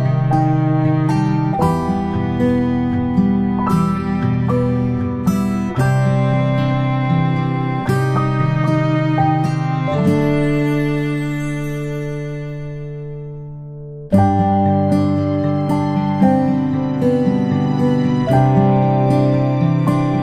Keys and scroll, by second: 0.6 a, 2.7 Delete, 6.5 Delete, 14.1 ctrl+Delete, 18.4 space, 18.6 space.